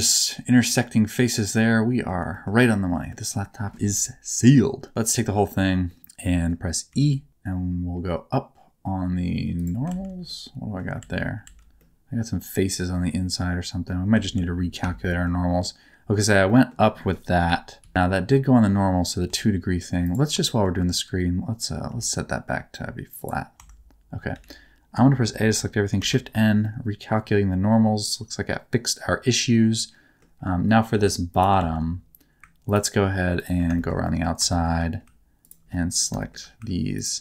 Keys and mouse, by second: 2.3 shift+middle click, 2.7 middle click, 5.9 middle click, 6.2 middle click, 6.9 e, 9.6 click, 9.9 alt+z, 10.3 middle click, 11.0 alt+z, 11.4 alt+z, 11.8-13.9 middle drag, 14.2 alt+z, 15.0 shift+middle click, 15.6 middle click, 16.5 middle click, 17.4 KP_1, 17.8 KP_3, 19.3 Tab, 20.4 shift+middle click, 21.9 alt+r, 23.6 Tab, 24.3 a, 26.0 shift+n, 26.6-30.2 middle drag, 30.9 2, 31.3 click, 31.6 alt+z, 33.8 shift+middle click, 34.0 middle click, 34.5 shift+middle click, 35.4 ctrl+click, 35.7 middle click, 36.2 shift+middle click.